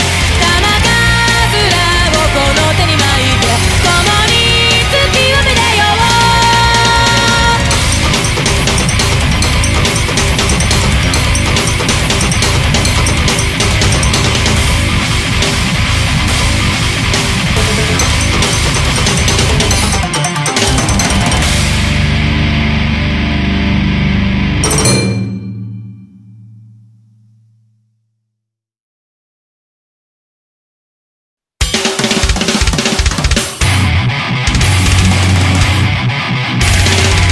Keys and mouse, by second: 3.7 ctrl+z, 5.5 ctrl+z, 7.6 ctrl+z, 7.8 ctrl+z, 10.1 ctrl+z, 10.7 ctrl+z, 11.5 ctrl+z, 12.1 ctrl+z, 12.6 ctrl+z, 13.6 ctrl+z, 21.7 ctrl+z, 31.4 space, 35.9 space, 36.2 ctrl+z, 37.2 ctrl+z.